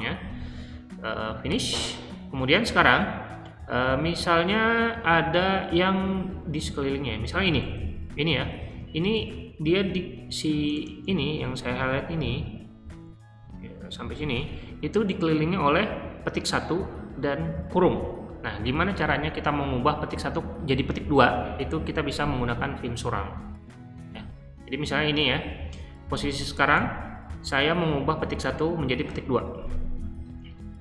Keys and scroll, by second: 1.4 q, 7.4-14.6 typing, 24.5 Escape, 26.7 h.